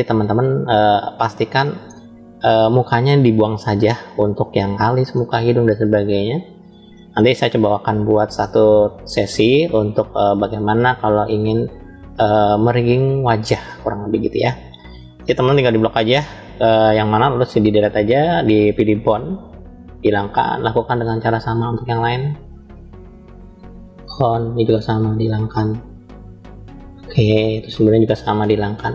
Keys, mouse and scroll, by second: 1.4-2.8 middle drag, 3.1 scroll up 2, 3.8 scroll up 1, 4.1-5.1 shift+middle drag, 5.7 shift+middle click, 6.8-9.0 middle drag, 10.3-12.1 middle drag, 13.4 scroll up 1, 13.5-15.0 middle drag, 15.7 click, 17.4 Delete, 21.0-22.1 drag, 23.0 Delete, 24.8 click, 26.0 Delete, 27.7-28.9 middle drag.